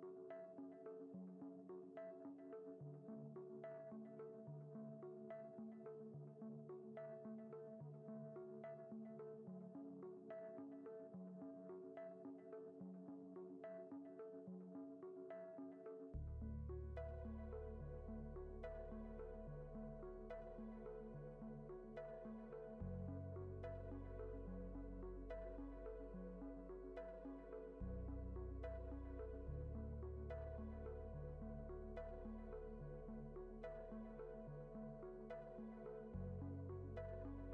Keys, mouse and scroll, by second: 5.8 click, 8.7 shift+a, 14.9 middle click, 16.0 shift+a, 22.4-24.3 drag, 26.4-27.7 drag, 31.8-34.3 drag, 33.1 KP_0, 36.5-37.5 drag.